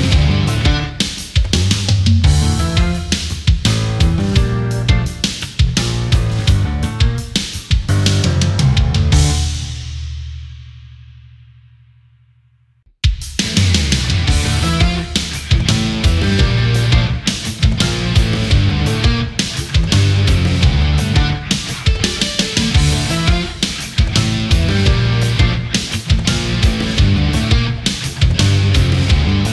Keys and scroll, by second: 16.3 ctrl+=, 16.5 space, 18.9 ctrl+z, 20.5 ctrl+0, 23.3 ctrl+=, 26.1 ctrl+a.